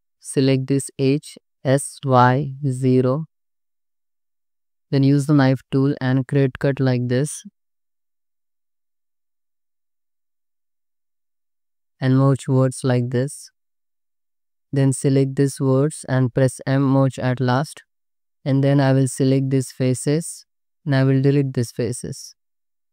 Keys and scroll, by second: 1.6 s, 2.1 y, 2.9 0, 4.2 1, 4.4 Escape, 5.4-10.0 typing, 11.0 ctrl+x, 11.2 1, 12.5 m, 15.6 m, 17.5 m, 18.1 2, 18.8 3, 21.0 x.